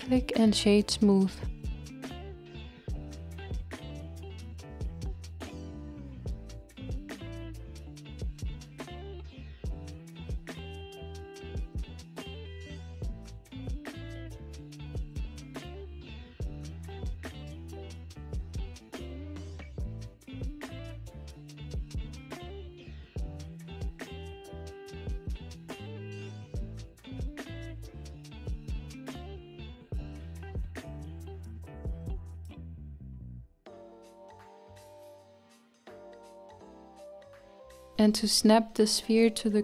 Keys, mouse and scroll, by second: 0.0-1.0 scroll up 4, 1.0-2.2 scroll up 1, 2.2-5.9 right drag, 5.9-7.3 scroll down 5, 7.8 click, 9.1-12.8 middle drag, 12.8-17.4 scroll up 1, 17.4-18.9 scroll up 1, 19.7 click, 21.7 click, 22.6 Tab, 24.9 click, 25.7 g, 29.0 z, 31.3 Tab, 33.9-39.6 middle drag.